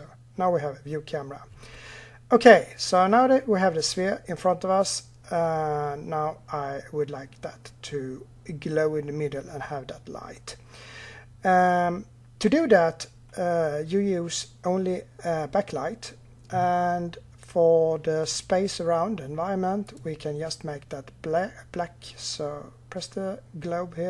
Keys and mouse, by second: 19.7-21.6 drag.